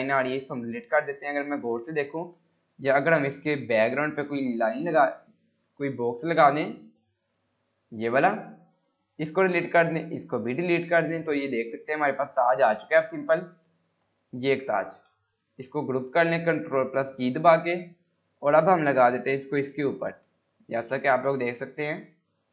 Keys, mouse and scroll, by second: 1.7 Delete, 2.1 scroll down 1, 3.5 click, 6.7 shift+Page_Down, 7.2 click, 8.6 scroll up 1, 9.1 click, 9.4 Delete, 10.1 click, 10.4 Delete, 11.0 scroll up 1, 11.3 scroll down 1, 12.2 click, 13.0 Delete, 13.7-14.3 click, 14.5 scroll down 1, 15.1 ctrl+z, 15.3-16.3 drag, 16.9 ctrl+g, 17.5-20.0 click, 20.1 scroll up 1, 21.1-22.5 click.